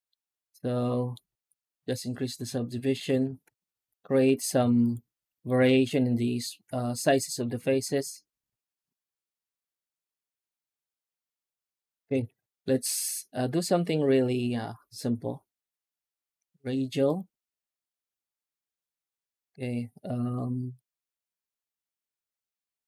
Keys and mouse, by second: 0.0 middle click, 1.1 w, 1.6 w, 2.3 Tab, 2.4 alt+middle click, 2.8 alt+middle click, 3.0 Tab, 3.6 ctrl+r, 5.0 ctrl+r, 6.3 ctrl+r, 7.7 ctrl+r, 10.3 ctrl+r, 11.4 a, 11.8 Tab, 12.0 shift+q.